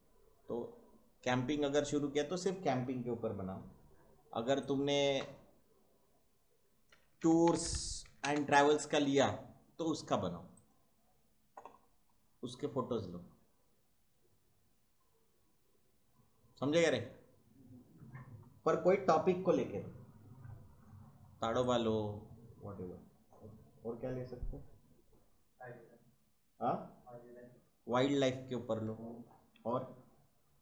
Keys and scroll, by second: 6.7-8.9 typing.